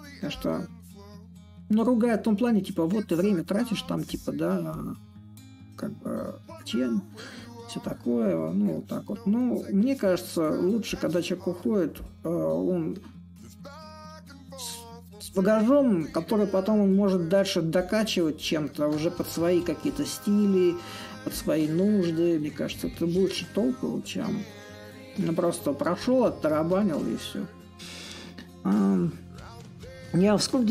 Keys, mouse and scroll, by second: 0.0-5.0 drag, 5.9 alt+click, 7.1 alt+click, 7.6-12.6 alt+drag, 13.5-16.5 ctrl+drag, 16.7-24.7 shift+drag, 25.7-30.7 drag.